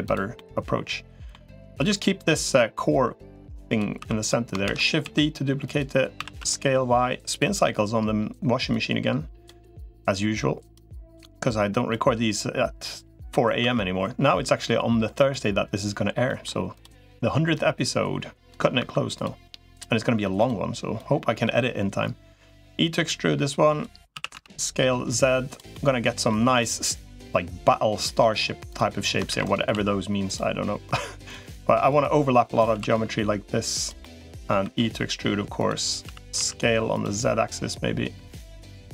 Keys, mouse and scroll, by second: 0.1 middle click, 1.8 2, 2.4-3.6 drag, 4.0 click, 4.0 3, 4.4 shift+d, 4.8 s, 6.0 s, 8.6 click, 10.6 click, 11.8-13.2 drag, 13.4 e, 16.1 middle click, 17.4-18.4 drag, 18.8 2, 20.2 3, 20.8-23.6 drag, 24.0 s, 25.5 middle click, 26.4 click, 27.2 click, 28.0 middle click, 29.2 shift+d, 29.6 s, 30.6 click, 31.8 click, 33.8 middle click, 34.4 e, 35.8 s, 37.2-38.3 drag, 38.4 middle click.